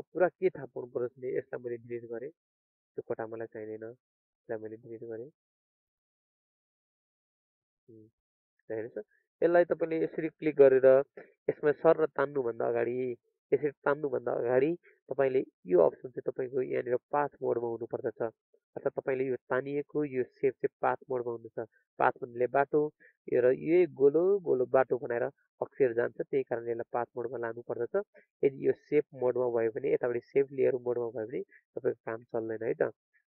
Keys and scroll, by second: 33.0 ctrl+alt+z.